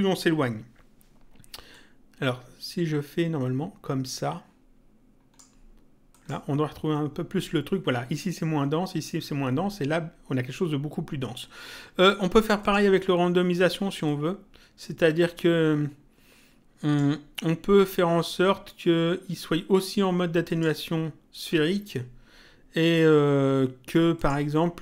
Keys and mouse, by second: 1.7 click, 6.1 click, 12.6 click, 14.1 click, 20.5 click, 24.1 click.